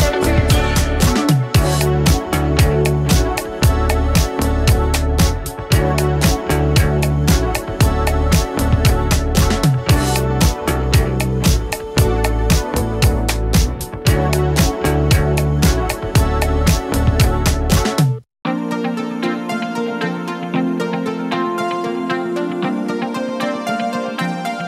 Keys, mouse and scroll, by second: 3.7 space, 5.7 space, 7.4 click, 8.8 space, 11.4 click, 13.4 u, 14.2-17.9 drag, 18.4 shift+s, 19.4-21.5 drag.